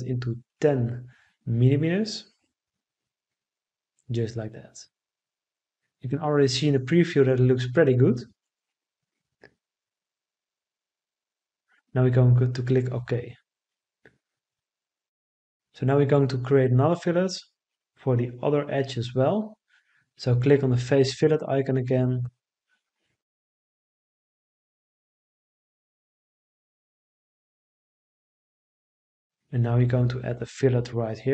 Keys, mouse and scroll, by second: 0.5 Return.